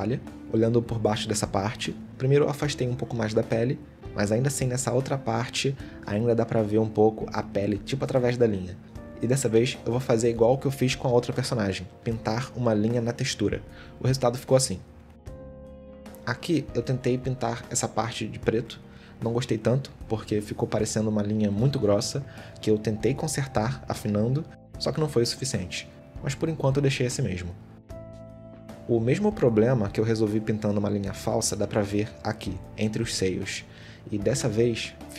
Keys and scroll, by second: 2.6 g, 3.6 g, 6.5 a, 9.1 ctrl+z, 10.6 ctrl+z, 11.4 ctrl+z, 19.2 Tab, 22.8 s, 24.0 s, 24.9 s, 26.4 a, 27.4 Tab.